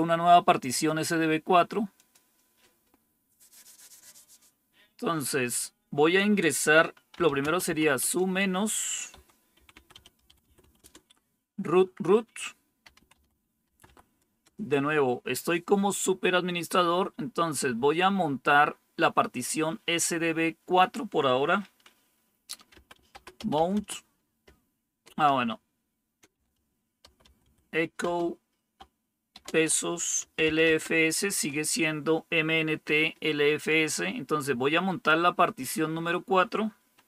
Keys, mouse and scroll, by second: 1.8 click, 6.9-11.0 typing, 12.5-14.3 typing, 22.4-23.9 typing, 25.2-27.9 typing, 29.2-31.7 typing.